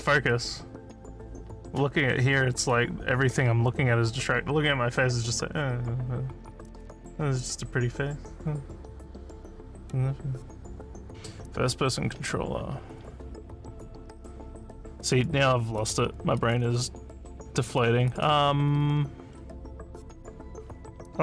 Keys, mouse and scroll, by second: 9.2 click, 14.1 click, 15.1 click, 15.8 click, 16.4 click, 17.2 click, 17.7 click, 18.1 click, 19.0-19.5 scroll down 3, 20.2 scroll down 1.